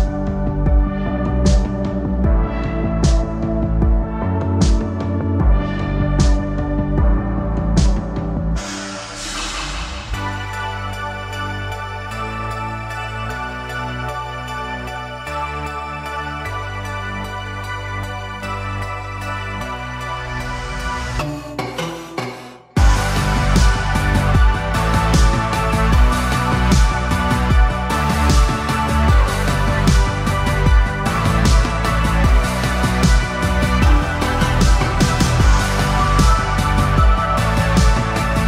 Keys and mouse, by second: 1.4 g, 4.2 a, 4.5 a, 5.4 c, 7.7 KP_3, 8.9 c, 11.7 g, 14.6 a, 14.8 a, 15.7 c, 19.4 c, 22.2 g, 24.4 a, 24.6 a, 25.5 c, 27.6 KP_3, 28.9 c, 31.7 g, 34.3 a, 34.6 a, 35.4 c.